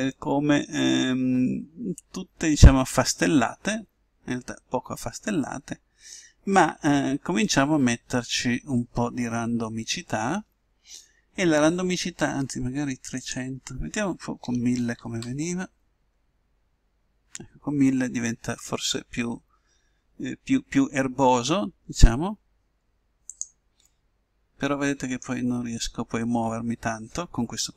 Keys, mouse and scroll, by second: 7.8-9.9 middle drag, 13.2-15.1 drag, 15.1 0, 24.2-25.9 middle drag.